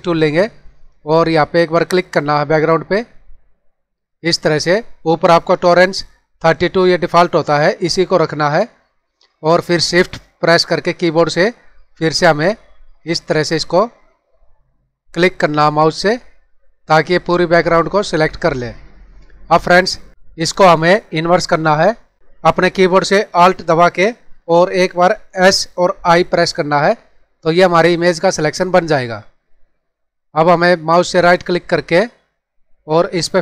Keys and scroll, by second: 25.4 alt+s, 26.0 alt+i.